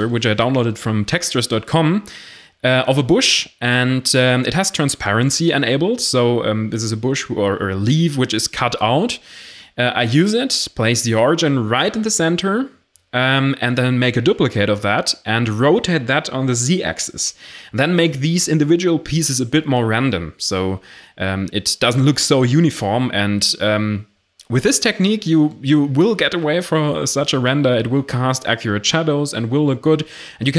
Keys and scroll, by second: 4.4 7, 7.4-9.6 typing, 9.1 Tab, 10.7 g, 10.7 x, 11.1 Tab, 11.7 r, 12.8-14.7 typing, 15.9-17.2 typing, 18.4 s, 18.5 x, 18.8 1, 18.9 Return, 20.0 r, 20.9 r, 22.5 a, 23.1 1, 23.5 ctrl+j, 23.8 shift+s, 24.0 x, 24.3 Tab, 26.4 r, 26.4 z, 27.8 ctrl+i, 28.1 r, 28.4 Tab, 28.6 a.